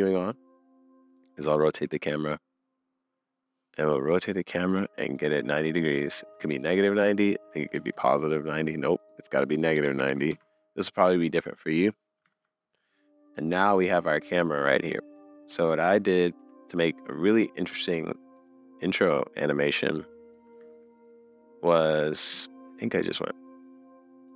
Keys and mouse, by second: 1.2 click, 1.9 super+z, 2.3-4.9 drag, 9.0-10.3 drag, 12.4 super+s, 15.5 Left, 15.8 Right, 16.4 Left, 18.5-20.4 shift+middle drag, 20.6 super+z, 22.3 shift+middle click.